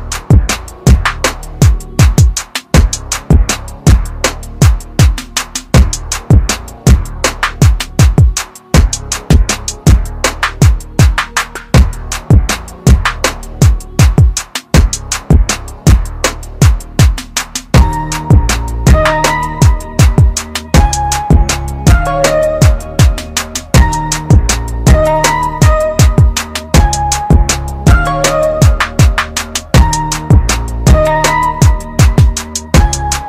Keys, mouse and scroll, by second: 2.0 click, 2.3 r, 3.0 click, 3.2 r, 4.5 click, 4.8 r, 6.0 click, 6.2 r, 7.0 click, 7.2 r, 8.6 click, 8.9 r, 9.6 click, 9.9 r, 16.3 click, 18.0 scroll up 1, 18.8 click, 21.1 scroll down 1, 22.8 click, 28.5 shift+click, 29.3 shift+click.